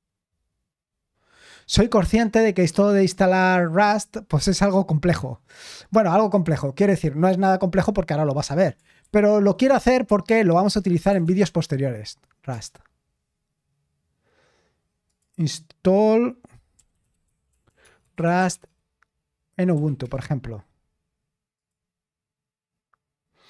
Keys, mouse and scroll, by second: 9.1 ctrl+t, 10.7-11.9 typing, 12.5 Return, 15.1 click, 16.5-21.8 typing, 21.6 click, 23.0-23.4 typing.